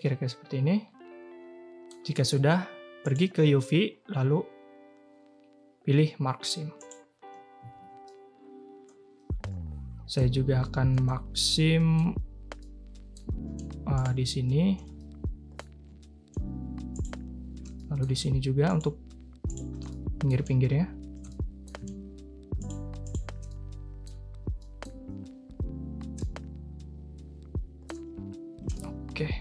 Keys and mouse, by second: 0.0-1.8 middle drag, 3.0-6.9 drag, 7.6 a, 7.7 a, 8.0-10.1 middle drag, 11.5-11.9 middle drag, 12.6 middle click, 15.0 middle click, 17.7 middle click, 19.8 middle click, 21.2 middle click, 23.4-24.0 drag, 24.5 middle click, 26.2-27.8 middle drag, 28.7-29.4 middle drag.